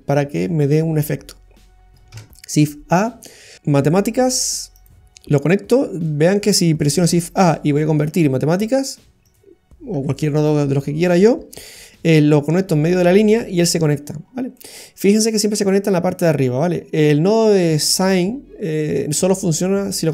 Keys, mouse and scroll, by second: 2.1 shift+a, 5.4-6.5 scroll up 4, 6.6 middle click, 7.0 shift+a, 9.9 Delete, 14.2-15.1 scroll up 3, 14.5 middle click, 17.0-18.1 scroll down 2.